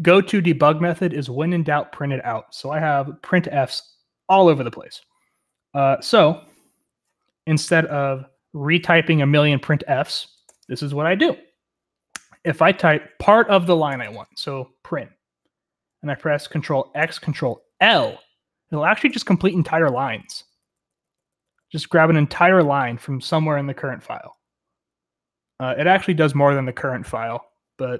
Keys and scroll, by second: 5.8-6.8 j, 6.8-9.7 k, 9.9 k, 10.3 o, 10.5 Return, 13.5-14.6 typing, 17.0 ctrl+x, 17.9 ctrl+l, 19.1 ctrl+n, 19.3 ctrl+n, 19.5 ctrl+n, 19.7 ctrl+n, 19.9 ctrl+n, 20.2 ctrl+n, 20.3 ctrl+n, 20.6 ctrl+n, 20.7 ctrl+n, 21.1 ctrl+n, 21.3 ctrl+n, 21.4 ctrl+n, 21.5 ctrl+n, 21.7 ctrl+n, 21.9 ctrl+p, 22.2 ctrl+p, 22.4-22.8 ctrl+p.